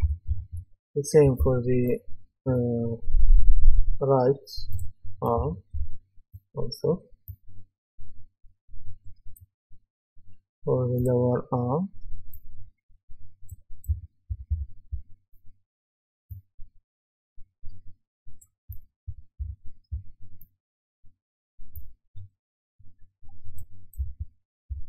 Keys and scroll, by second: 0.0-1.4 typing, 5.4-5.7 typing, 13.9-15.4 typing, 18.4-19.9 typing, 23.7-24.8 typing.